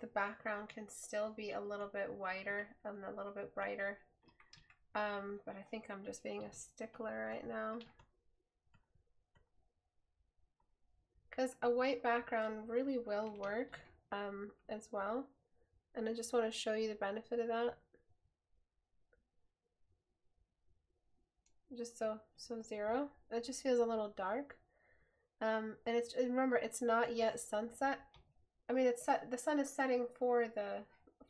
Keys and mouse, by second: 28.4 right click.